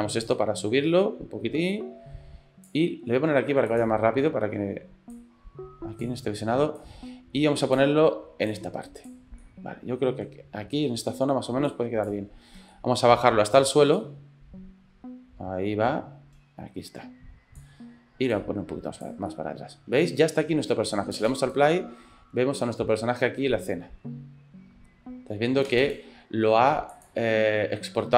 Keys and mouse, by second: 0.3-2.9 drag, 3.7 click, 5.2 click, 6.8-7.9 drag, 8.5 click, 9.4 middle click, 11.7 click, 12.7 ctrl+click, 14.0-17.7 drag, 18.4 click, 19.3 middle click, 20.0 shift+click, 20.3 middle click, 21.2 space, 25.7 space.